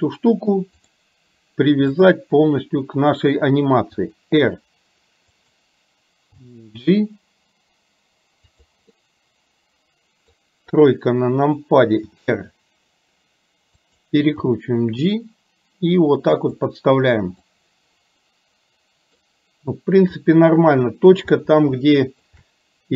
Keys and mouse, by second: 2.0 click, 4.1 r, 6.5 g, 9.0-10.4 middle drag, 10.7 KP_3, 12.2 r, 14.5 g, 17.5-19.2 middle drag, 20.4 middle click, 22.0 shift+middle click.